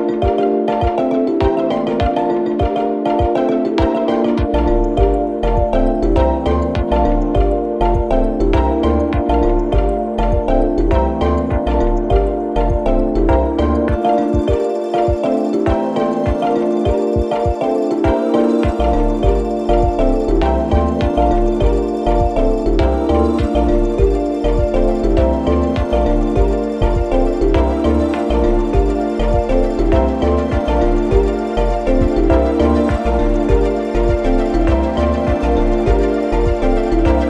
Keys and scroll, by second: 2.6 4, 7.7 3, 9.4 ], 10.1 4, 19.5 3, 27.2 ], 29.3 ,.